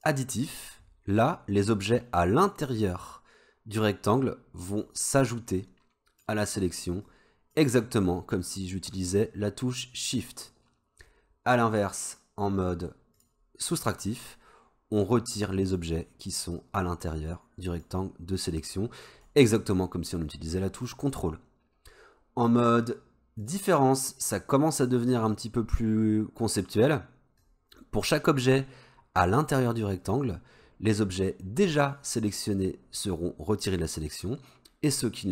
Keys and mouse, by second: 0.0 click, 1.9-4.9 drag, 5.5-6.3 drag, 7.2-7.7 drag, 13.2 click, 15.1-16.0 drag, 16.7-18.0 drag, 18.9-19.3 drag, 23.5 click, 27.5-35.3 drag.